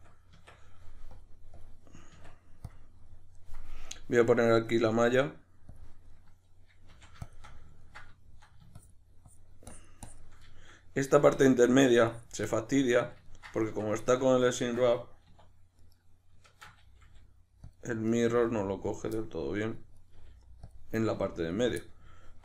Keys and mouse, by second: 1.1-2.1 drag, 2.1 Tab, 3.1-4.3 middle drag, 4.3-6.1 drag, 6.1-7.3 middle drag, 6.9 f, 7.3 shift+click, 7.5-8.8 middle drag, 8.8-10.5 shift+drag, 10.5-12.1 shift+middle drag, 12.1 shift+click, 12.9-15.8 middle drag, 13.7 Tab, 15.3 1, 15.8 right click, 16.5 shift+Tab, 17.8 click, 18.1 right click, 18.3 g, 19.0 click, 19.2-20.0 middle drag, 20.0 right click, 20.1 g, 20.7 click, 21.0 right click, 21.1 g, 21.6 click, 21.8-22.4 middle drag.